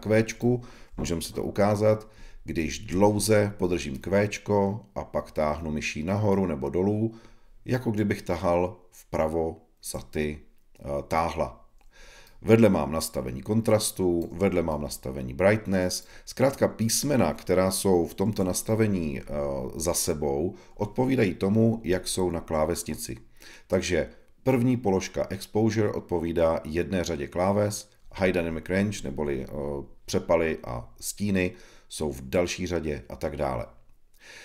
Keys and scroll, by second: 18.2 shift+super+e.